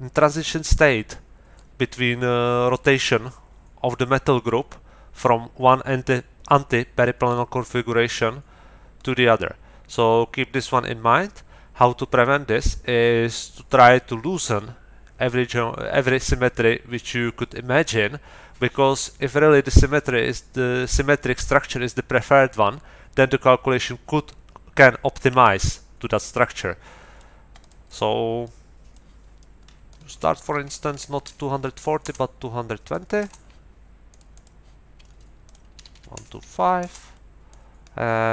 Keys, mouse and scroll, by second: 7.2-19.4 middle drag, 20.8-22.7 middle drag, 25.4-27.4 middle drag, 27.6 middle click, 28.4 click, 29.9 click, 30.4 Right, 30.9 BackSpace, 31.9 KP_2, 32.0 Return, 33.2 Return, 34.1 middle click, 35.4 middle click, 36.1 BackSpace, 36.6 KP_5, 36.8 Return, 37.5-38.3 middle drag.